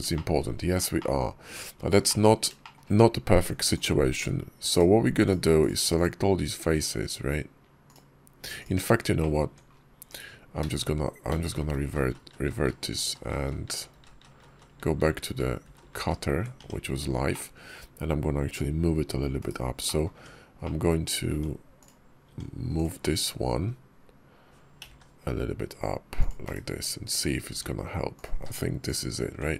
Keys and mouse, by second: 0.0 shift+click, 0.8-1.3 drag, 1.9-2.3 drag, 2.5 shift+click, 3.2 Tab, 3.6 click, 4.6 shift+click, 5.8 shift+click, 7.7 shift+click, 9.0 middle click, 9.3 Tab, 9.9 /, 11.2 ctrl+z, 11.7 ctrl+z, 11.9-12.4 ctrl+z, 12.7-13.4 ctrl+z, 13.8 ctrl+z, 13.9 ctrl+z, 14.1 ctrl+z, 14.4 ctrl+z, 14.5 ctrl+z, 14.8 ctrl+z, 14.9 ctrl+z, 15.1 ctrl+z, 15.5 ctrl+z, 15.7 ctrl+z, 16.0 ctrl+z, 16.4 Tab, 17.1-17.6 drag, 19.2 /, 19.7 click, 20.1 Tab, 20.5 click, 21.2 Tab, 21.6 click, 22.1 Tab, 22.6 click, 24.6 g, 26.3 /, 27.3 Tab, 28.0 click, 28.2 q.